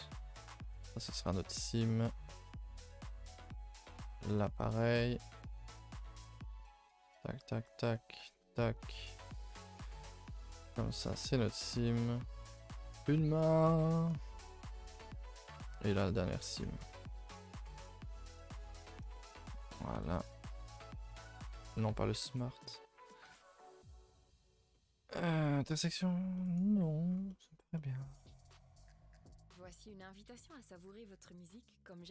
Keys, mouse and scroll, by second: 0.7 2, 1.8 right click, 2.1 scroll down 1, 2.2 middle click, 2.4 a, 2.6 a, 2.6 middle click, 2.9-4.1 scroll up 7, 4.1 alt+Left, 4.8 right click, 5.0 scroll down 2, 5.2 middle click, 5.9 scroll up 2, 6.3 middle click, 6.8 click, 7.2 shift+click, 7.4 shift+click, 7.9 middle click, 8.3 shift+click, 8.5-10.6 middle drag, 10.6 alt+shift+click, 11.8 right click, 12.1 a, 12.3 a, 13.8-14.1 middle drag, 14.1-14.5 scroll down 1, 14.5 middle click, 15.1-15.5 scroll up 1, 15.5 click, 16.1 right click, 16.3 a, 16.4 a, 16.9-17.7 scroll down 4, 17.1 middle click, 17.8 middle click, 18.8-19.5 scroll down 3, 19.1 shift+middle click, 19.5 a, 22.7 u, 23.2 a, 23.4 a, 23.7 a, 25.1 a, 25.3 a, 28.2 a, 28.8 n, 29.7 click, 30.5 a, 31.1 a, 31.8 n.